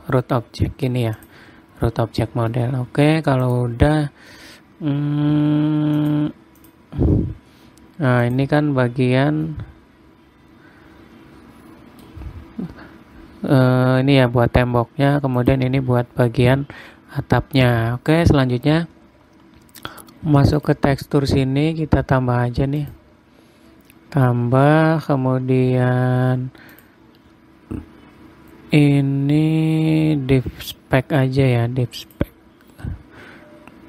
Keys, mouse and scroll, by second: 1.7 click, 3.0 middle click, 4.0 click, 6.5 click, 8.8 click, 10.0 middle click, 15.9 click, 18.7-19.0 scroll down 1, 19.9-21.1 scroll down 10, 21.1 click, 23.3 click, 24.4-26.4 scroll down 29, 27.3 click.